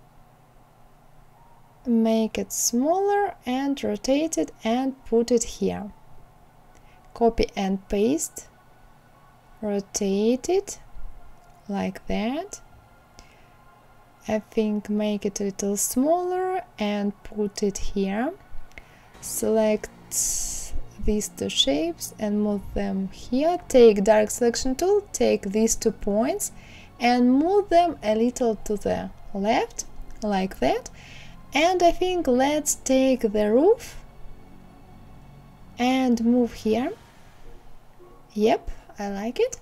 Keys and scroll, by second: 6.0 ctrl+c, 6.4 ctrl+v, 27.0 Left.